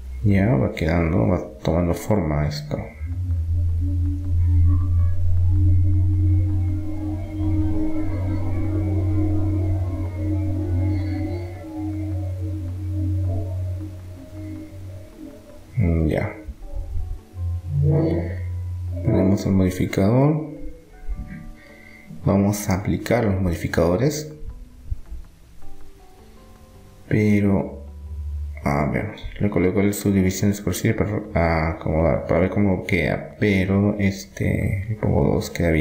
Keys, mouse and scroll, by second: 2.2 KP_3, 5.5-7.5 drag, 8.8-10.9 middle drag, 13.9-18.5 middle drag, 18.5-20.8 drag, 20.9-22.5 right drag, 24.6-26.5 drag, 28.6-30.2 middle drag.